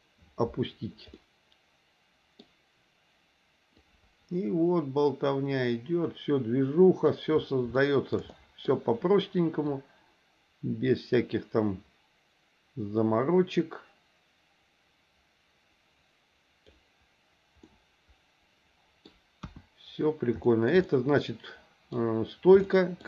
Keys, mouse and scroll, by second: 1.1-2.4 middle drag, 3.8-7.1 drag, 7.7 shift+middle click, 8.3 middle click, 9.7-16.7 drag, 17.6-19.1 middle drag, 19.4 KP_1, 20.4 shift+middle click, 20.8-21.9 middle drag, 22.7 shift+middle click.